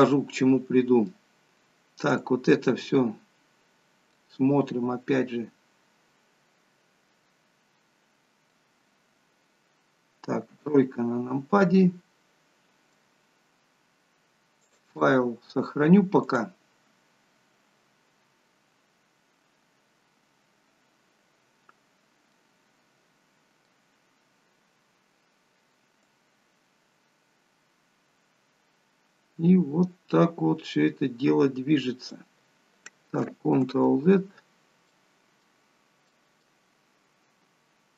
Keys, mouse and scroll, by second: 2.6 click, 4.2 middle click, 10.5 KP_3, 11.6 scroll down 2, 14.7 click, 21.9-22.4 scroll up 2, 22.4 middle click, 26.1 click, 34.0 ctrl+z, 35.0 middle click, 35.8 scroll down 2, 36.2 middle click.